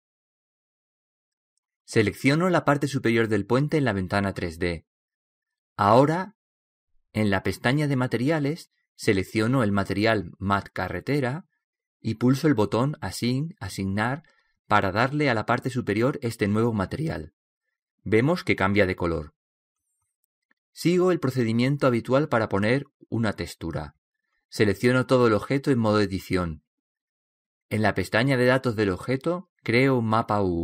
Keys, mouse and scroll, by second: 11.0-12.9 drag, 14.9-16.8 drag, 25.5 Tab, 26.2 Tab, 28.9-30.6 drag.